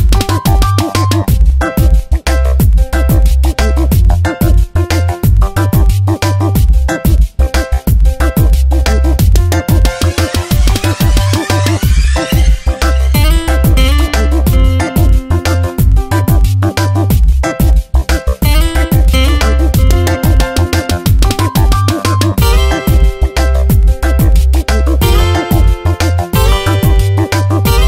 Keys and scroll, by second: 6.5 F9, 8.3 Tab, 13.2 m, 16.1 Delete, 16.8 ctrl+d, 17.2 v, 19.0 m, 20.2 space, 21.2 ctrl+x, 22.9 v, 23.2 ctrl+t, 25.4 Return, 25.7 v, 26.1 shift+Left, 27.1 v.